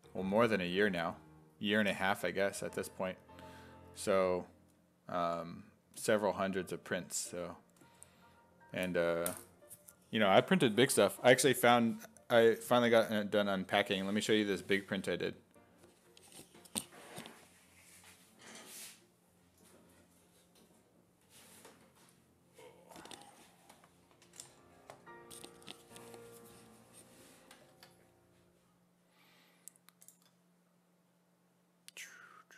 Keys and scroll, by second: 2.2 1, 4.6 s, 5.3 5, 8.7 5, 27.7 alt+Tab.